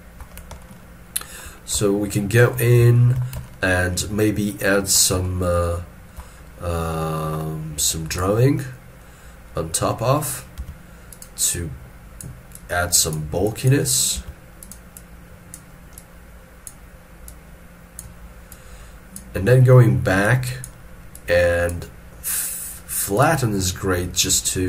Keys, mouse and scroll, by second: 0.6 ctrl+middle click, 1.8 ctrl+middle click, 2.6 ctrl+scroll down 1, 3.4 ctrl+middle click, 5.2 shift+middle click, 7.3-9.0 scroll up 1, 10.6-11.5 scroll, 11.5 double click, 14.2 f, 15.0 double click.